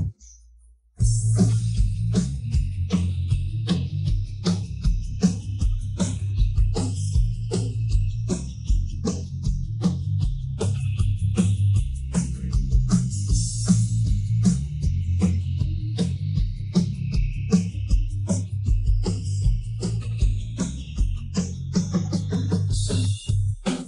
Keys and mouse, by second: 0.1-0.8 middle drag, 1.8 middle drag, 3.4 ctrl+2, 3.7-4.0 middle drag, 4.8-7.7 middle drag, 8.1-11.2 middle drag, 12.3 middle click, 12.8-15.2 middle drag, 15.4-16.6 middle drag, 17.6-18.4 middle drag, 19.0 KP_1, 19.8 KP_3, 22.3 click, 23.0 click, 23.6 middle click.